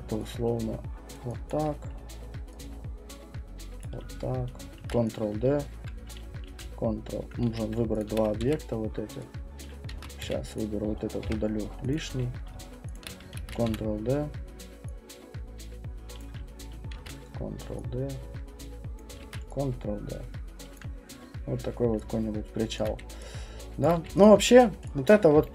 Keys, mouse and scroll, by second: 0.4 alt+click, 1.1 click, 1.5 alt+click, 3.8 click, 4.8 ctrl+d, 6.1 click, 6.5 ctrl+d, 7.5 q, 8.0 shift+click, 8.4 w, 9.6 click, 10.0 ctrl+z, 10.2 q, 10.6 click, 11.2 Delete, 11.9 click, 12.1 q, 12.9 shift+click, 13.3 ctrl+d, 13.7 w, 16.2 click, 17.0 ctrl+d, 19.0 click, 19.2 ctrl+d, 20.7 click, 21.3 middle click, 21.3 middle click, 22.8 alt+click, 23.8 alt+click, 23.9 q, 24.2 click, 24.4 middle click, 24.5 middle click, 25.1 alt+click.